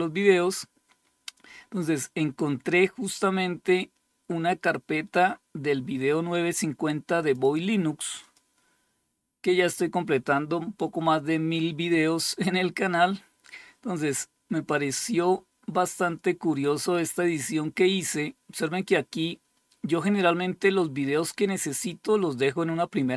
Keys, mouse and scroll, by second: 0.5-1.0 scroll down 2, 1.0-1.7 scroll down 1, 1.7-2.6 scroll down 1, 2.6-6.6 scroll down 1, 6.6-8.2 drag.